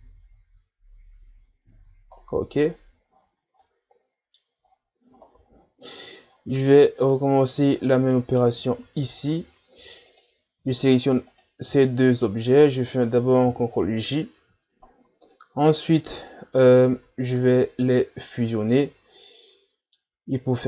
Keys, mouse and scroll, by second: 0.1 Tab, 1.4-1.8 scroll down 2, 1.8 Tab, 2.2 scroll down 1, 2.6-3.5 ctrl+scroll up 9, 3.6-4.7 middle drag, 4.7-5.4 ctrl+scroll up 4, 5.8-6.3 scroll up 2, 6.3-6.8 ctrl+scroll up 4, 6.8 scroll down 3, 7.1-7.7 middle drag, 7.7-8.1 scroll up 4, 8.1-8.7 middle drag, 8.7-9.6 shift+scroll down 8, 9.6 scroll up 3, 10.1 right click, 11.3 right click, 12.1 shift+right click, 13.5 ctrl+j, 14.9-15.3 shift+scroll down 4, 15.3-16.4 middle drag, 16.4-16.9 scroll up 3, 16.9 Tab, 17.3-20.6 middle drag.